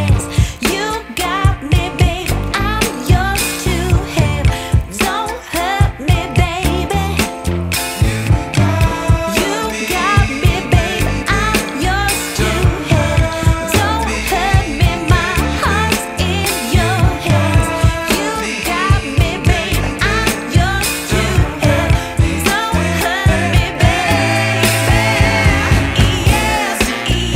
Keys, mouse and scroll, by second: 0.6 scroll down 1, 0.8-1.4 scroll up 1, 1.4 right click, 2.6 scroll down 1, 2.7 scroll up 1, 2.9 right click, 3.3 scroll down 1, 3.4 scroll up 1, 3.7 right click, 4.3 scroll up 1, 4.6 right click, 5.4 scroll up 1, 6.6 ctrl+shift+click, 9.3 ctrl+shift+click, 11.3 scroll down 1, 11.5 right click, 13.0-13.8 scroll up 1, 13.8 right click, 14.4-15.1 scroll up 1, 15.6 ctrl+shift+click, 19.0 ctrl+shift+click, 21.2-23.5 shift+drag, 24.1 click, 25.1-27.3 shift+drag.